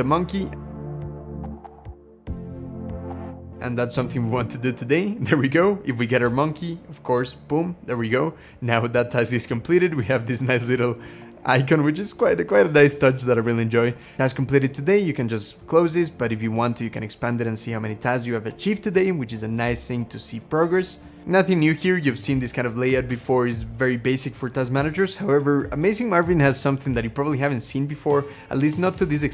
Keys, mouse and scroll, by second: 3.6 Return, 8.8 click, 10.8 click, 11.1 scroll down 1, 20.7 scroll up 3.